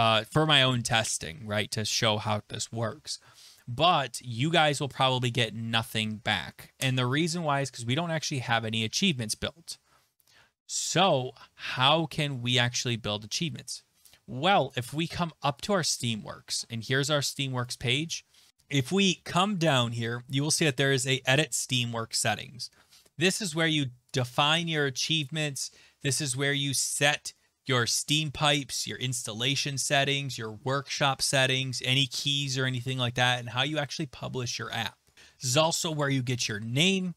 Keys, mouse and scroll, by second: 14.7 click, 15.7 click, 17.6 click, 18.5-19.2 scroll, 19.2-19.8 scroll, 24.2 click.